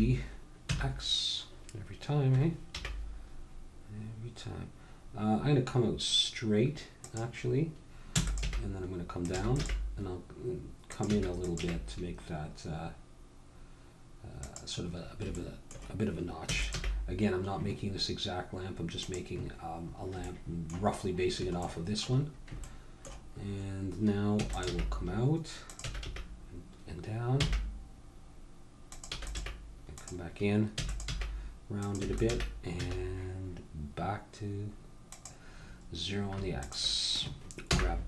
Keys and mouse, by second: 2.8 g, 8.1 e, 8.4 g, 9.4 e, 9.6 g, 11.1 e, 15.4-17.0 middle drag, 16.5 e, 16.8 g, 19.8 middle click, 22.0-23.4 middle drag, 24.3 e, 24.7 g, 25.9 e, 29.1 e, 29.4 g, 30.7 e, 31.1 g, 32.0 e, 32.3 g, 35.7 middle click, 36.6-38.0 drag, 37.7 n.